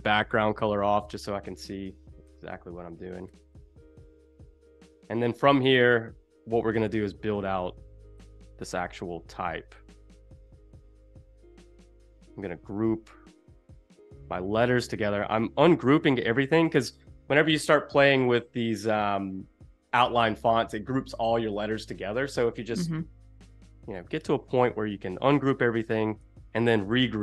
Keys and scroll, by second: 4.1 super+=, 4.4 space, 8.7 shift+super+g, 10.7 shift+super+g, 14.0 shift+super+g, 26.5 super+g.